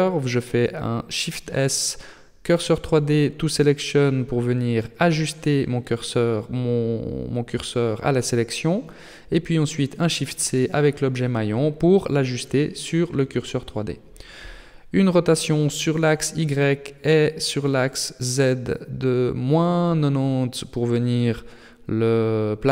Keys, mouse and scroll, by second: 3.2 Tab, 4.1 right click, 5.7 shift+s, 9.3 shift+middle click, 9.9 middle click, 11.1 shift+middle click, 12.3 Tab, 13.0 a, 13.3 a, 14.5 r, 16.1 r, 18.9 r, 22.4 Tab.